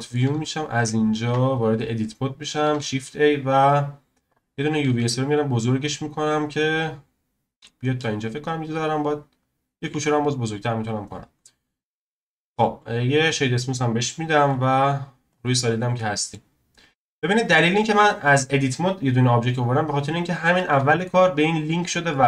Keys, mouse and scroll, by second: 0.4-0.7 scroll up 2, 0.7 click, 1.2 Tab, 1.8-2.2 scroll up 1, 2.6 shift+a, 4.9 s, 6.7 click, 8.2-9.3 scroll down 7, 9.3-9.9 scroll up 2, 9.9 s, 11.3-12.1 scroll up 1, 12.1 Tab, 12.9 right click, 14.4 z, 15.6-15.9 scroll down 2, 15.9 middle click, 16.4-17.2 scroll down 1, 17.2-19.1 scroll up 1, 19.1-19.4 scroll up 4, 19.4-20.2 scroll down 1, 20.2-20.5 scroll up 1, 20.5-21.5 middle drag, 21.5-22.1 scroll down 1, 22.1-22.2 middle drag.